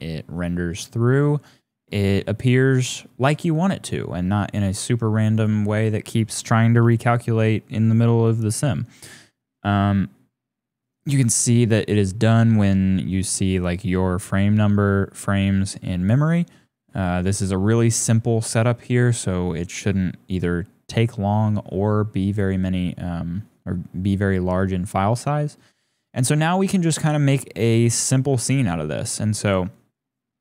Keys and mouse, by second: 4.3 middle click, 17.3-18.7 drag, 19.0 shift+click, 25.4 click, 25.9 click, 27.1-28.2 drag, 28.4 shift+click, 28.8 shift+click, 29.1 shift+middle click.